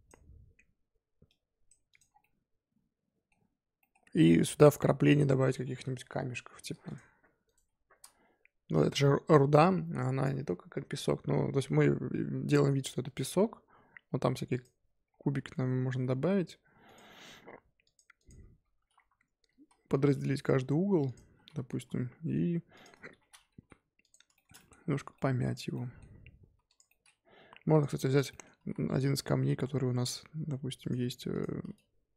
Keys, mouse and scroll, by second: 1.2 click, 2.1 scroll down 1, 2.2-3.3 middle drag, 3.3-3.8 scroll up 3, 3.8 middle drag, 4.0 scroll up 3, 4.5 click, 4.9 scroll down 4, 5.5 scroll up 3, 6.8 click, 7.4-7.8 shift+right drag, 7.8 shift+a, 15.0-15.8 scroll down 7, 15.8 Tab, 16.1 s, 16.9-17.8 scroll up 3, 17.8 click, 18.1 click, 18.3-18.9 scroll up 4, 18.9 2, 20.0 ctrl+b, 21.3 a, 21.6 s, 23.1 Tab, 23.2 scroll down 2, 23.5 g, 24.3 shift+middle click, 24.7 scroll up 3, 24.9 1, 25.1-26.5 middle drag, 26.5 3, 26.6 click, 26.8 middle click, 27.7 click, 28.3 middle click, 28.5 g, 31.3 click, 31.6 g.